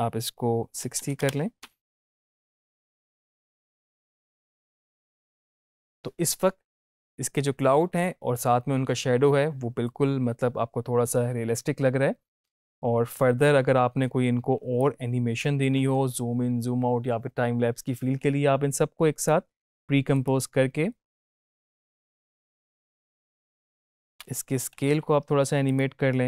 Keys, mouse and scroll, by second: 1.6 space, 14.4 space, 14.8-15.4 drag, 19.2-19.8 click, 20.1 right click, 21.2 click, 24.0 Up, 24.7 s, 25.6-26.2 drag.